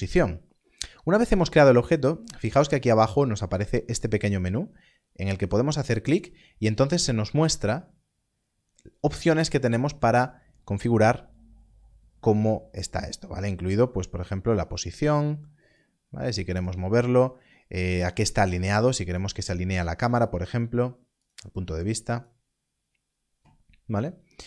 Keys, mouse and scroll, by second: 5.2 click, 9.8 click, 19.1 click, 21.2 click.